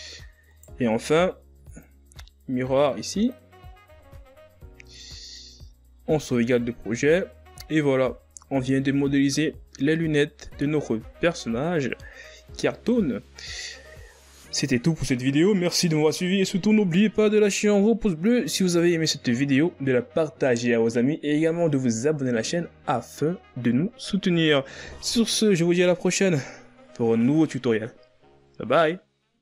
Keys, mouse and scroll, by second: 0.4 right click, 1.6-3.8 drag, 3.8 a, 4.1 scroll down 4, 6.0 ctrl+s, 6.9 shift+scroll down 3, 7.3-7.8 scroll up 4, 7.8 z, 10.4-10.9 scroll down 2, 11.3-13.1 ctrl+scroll down 2, 13.1-14.4 scroll down 2.